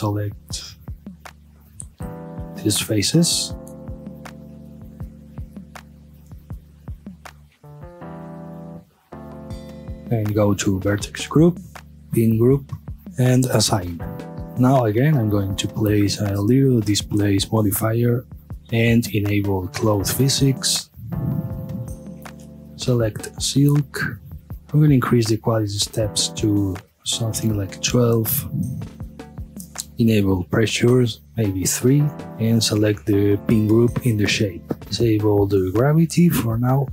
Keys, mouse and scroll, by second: 0.4 3, 1.1 alt+click, 2.0 alt+shift+click, 2.6-3.5 scroll down 1, 3.5 scroll up 1, 3.6-4.1 middle drag, 4.1 scroll up 1, 5.0 alt+shift+click, 5.5 scroll down 1, 6.2 scroll up 1, 7.0 alt+shift+click, 9.8 click, 11.2-12.1 drag, 12.1-12.9 drag, 12.9 Return, 13.7 click, 14.4-15.8 middle drag, 15.8-16.3 drag, 16.7-18.3 drag, 18.3-19.1 middle drag, 19.1 click, 20.2 click, 20.9-24.5 drag, 24.8-27.4 drag, 27.4 KP_Enter, 28.2-29.1 scroll down 1, 30.1 click, 31.1 click, 31.5 KP_Enter, 32.1 scroll down 1, 32.4-34.8 drag, 34.8 scroll down 1, 35.0-36.3 drag, 36.3-36.9 middle drag.